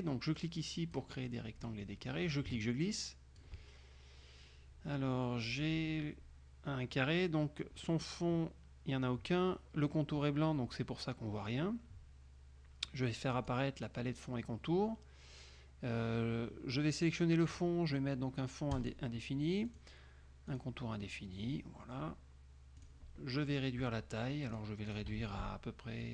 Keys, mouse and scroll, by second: 0.6 click, 1.4 click, 1.5 middle click, 2.4-3.8 ctrl+drag, 13.5 click, 18.9 click, 19.8 click, 20.6 click, 22.9 click, 24.6 click, 25.0 ctrl+click, 25.2 ctrl+a.